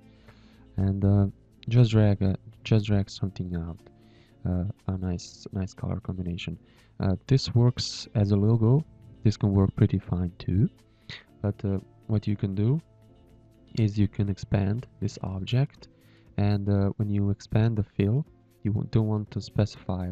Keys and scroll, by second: 2.8 g, 5.8 z, 6.5 space, 7.2 ctrl+h, 7.7 z, 8.4 z, 8.9 ctrl+g, 9.6 space, 11.5 v, 12.1 v.